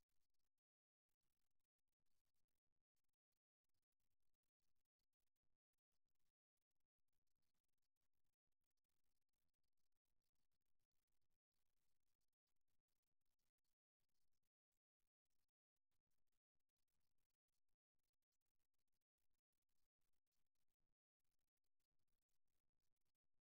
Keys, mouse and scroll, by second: 1.2-4.6 middle drag, 4.6 e, 10.3 e, 11.2-12.5 drag, 13.6-15.4 middle drag, 16.8 s, 18.2-19.2 middle drag, 20.4 s, 21.2 click, 21.4-23.2 middle drag.